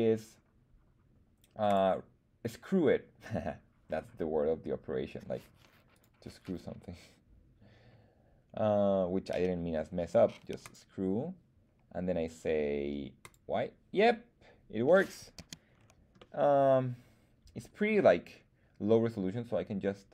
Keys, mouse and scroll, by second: 1.6 click, 5.9-10.7 drag, 13.2 click, 14.0-15.0 middle drag, 15.3 z, 15.7-17.0 scroll down 2, 16.1-17.9 middle drag, 17.9-18.3 scroll down 1.